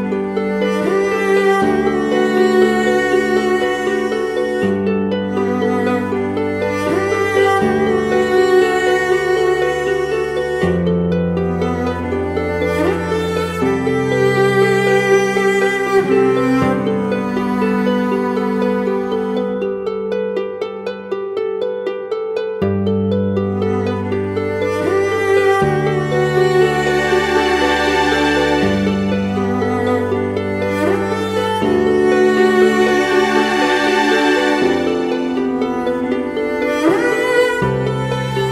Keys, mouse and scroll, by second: 23.9-25.3 typing, 27.4 double click.